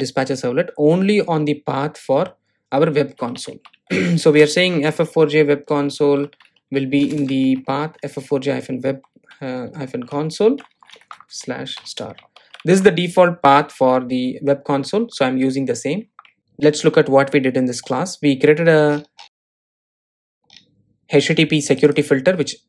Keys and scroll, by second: 13.0 super+s.